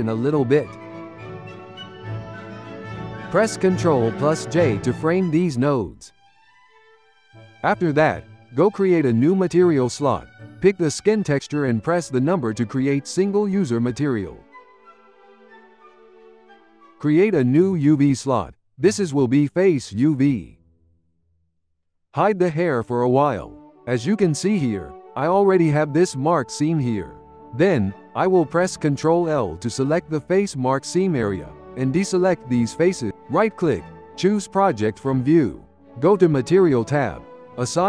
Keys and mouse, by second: 0.8-2.2 drag, 2.2-3.4 ctrl+middle drag, 3.4 click, 4.5 ctrl+j, 5.0 shift+middle click, 5.7 click, 5.9 g, 7.3 click, 8.0-11.8 drag, 12.8-19.7 drag, 20.3-21.1 shift+middle drag, 21.1 Tab, 21.9 3, 22.8-24.3 drag, 24.3 middle click, 25.0 click, 26.1-27.6 middle drag, 27.6 z, 28.6 middle click, 28.7 click, 29.0 shift+click, 29.8 ctrl+l, 30.2 shift+click, 30.7 shift+click, 31.3 shift+click, 31.6 shift+click, 32.2 shift+click, 32.6 shift+click, 33.2 u, 36.3-37.8 drag.